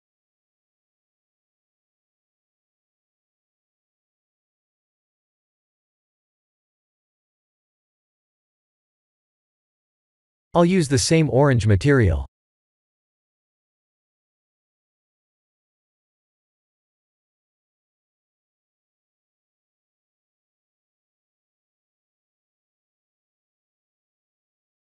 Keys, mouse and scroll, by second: 0.1 middle click, 1.8-3.2 scroll down 5, 4.7 click, 6.2 click, 7.6 click, 8.8 KP_1, 9.5 shift+z, 11.0 shift+z, 11.8 click, 14.2 click, 15.5 click, 23.5 click.